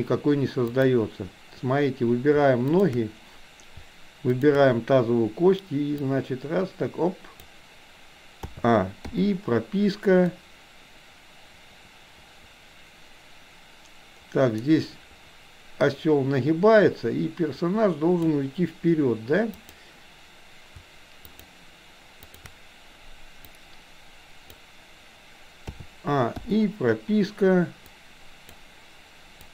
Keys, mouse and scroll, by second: 0.7 click, 2.8 shift+click, 4.3 shift+click, 5.9-7.5 drag, 8.4 a, 9.2 i, 10.4-18.4 drag, 19.5 click, 21.3 shift+click, 22.3 shift+drag, 23.8 click, 25.7 a, 26.5 i, 27.9 click, 29.4 click.